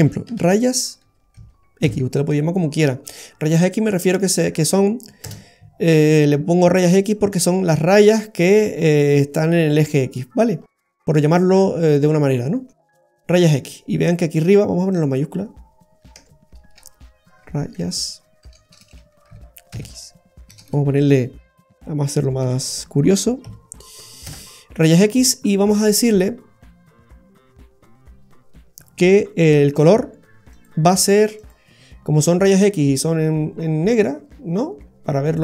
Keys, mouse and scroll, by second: 6.3-6.6 scroll down 1, 6.9 middle click, 8.5-9.1 scroll up 4, 9.1 middle click, 10.6 scroll up 3, 11.0 middle click, 11.5-12.0 scroll up 4, 12.3 middle click, 14.9 click, 17.7 a, 18.8 BackSpace, 18.9 BackSpace, 20.6 BackSpace, 29.7 click, 30.5 click, 31.3 click.